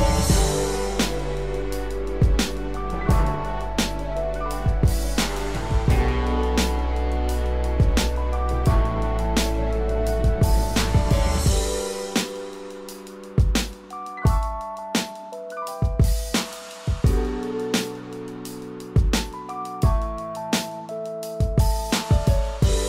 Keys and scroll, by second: 0.3 ctrl+=.